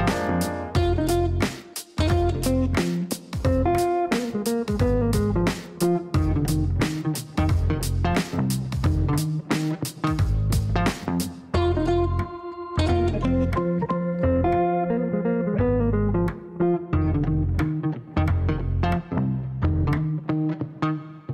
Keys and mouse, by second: 4.1 click, 6.1 click, 9.0 click, 10.1 click, 10.4 click, 11.7-13.5 typing, 14.2 click, 14.9 click, 15.9-17.5 typing, 19.7 shift+d.